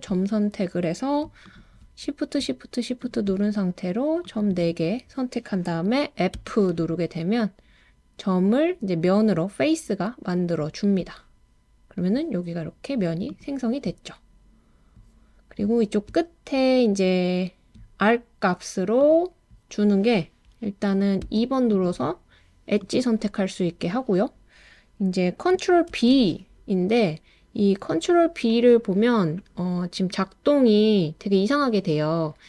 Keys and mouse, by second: 3.0 shift+click, 6.4 f, 19.0 click, 21.3 2, 21.7 click, 22.9 click, 25.9 super+b.